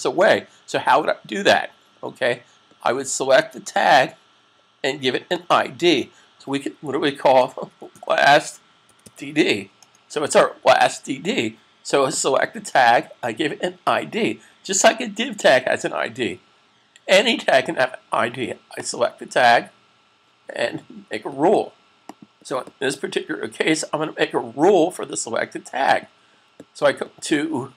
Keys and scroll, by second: 6.7-8.9 typing.